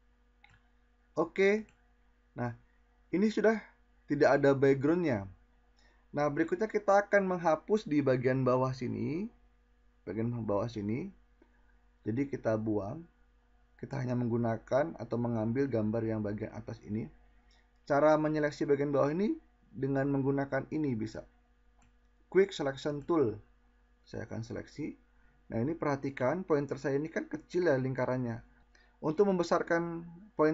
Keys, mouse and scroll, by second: 11.8 click.